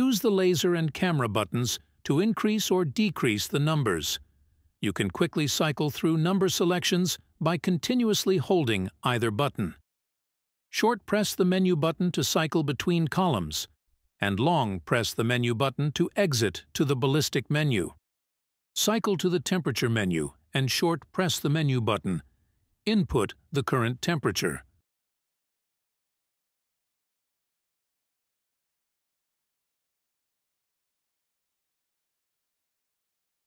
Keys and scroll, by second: 7.1 Menu, 25.0 Menu, 28.1 Menu.